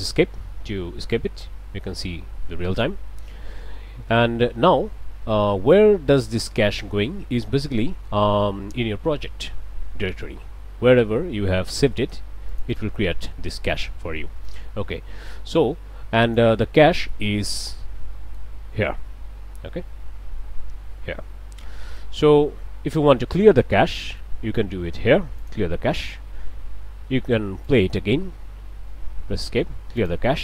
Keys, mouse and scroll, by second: 0.0 Escape, 1.1-3.0 drag, 3.9 shift+Left, 5.8-7.0 drag, 7.3 click, 12.5 click, 14.5-16.6 drag, 17.0-18.6 drag, 20.9-22.2 drag, 23.4-24.4 drag, 25.4 click, 27.7 click, 29.1 Escape, 30.0 click.